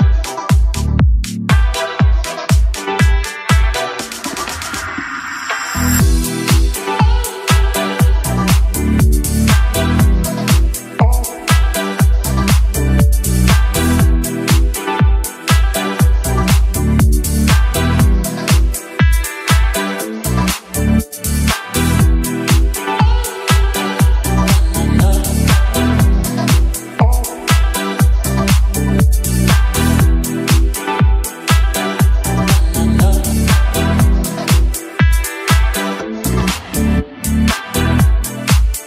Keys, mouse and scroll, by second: 0.9 drag, 2.0 n, 3.3 n, 4.0 click, 4.3 n, 5.7-9.0 drag, 12.9 Home, 15.2 click, 15.8 click, 16.6 t, 17.7 middle click, 19.8 click, 22.4 shift+a, 25.7 r, 27.8 x, 34.0 click, 34.4 r, 34.8 z, 36.4 click, 36.8-37.3 middle drag, 37.8 KP_1, 38.2 KP_Decimal.